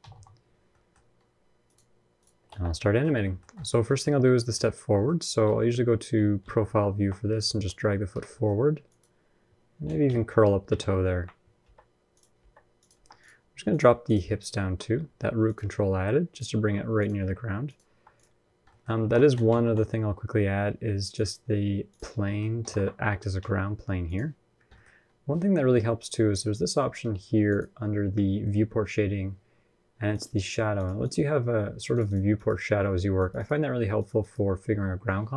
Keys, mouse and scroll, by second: 0.5 middle click, 0.8-1.2 scroll up 1, 1.4 click, 1.4 scroll up 3, 2.3 ctrl+Tab, 2.7 shift+middle click, 2.9 scroll up 1, 3.0 middle click, 3.4 shift+middle click, 3.6-3.9 scroll up 2, 3.7 middle click, 5.0 scroll up 1, 5.2 KP_1, 5.5 KP_3, 6.2 ctrl+KP_3, 7.3 g, 8.1 middle click, 8.7 click, 9.6 KP_1, 9.8 KP_3, 10.6 ctrl+KP_3, 11.4 g, 12.2 r, 12.7 g, 13.5 click, 14.4 g, 16.1 click, 16.4 g, 17.0 r, 17.7 g, 18.3-18.8 scroll down 5, 18.5 middle click, 18.8 ctrl+Tab, 19.0 middle click, 19.3 shift+a, 21.9-22.3 scroll down 3, 22.1 middle click, 22.4 alt+r, 23.2 s, 24.3 scroll down 3, 24.5 middle click, 24.6-25.2 scroll up 1, 25.2-26.5 scroll down 1, 27.3 click, 27.3 scroll down 9.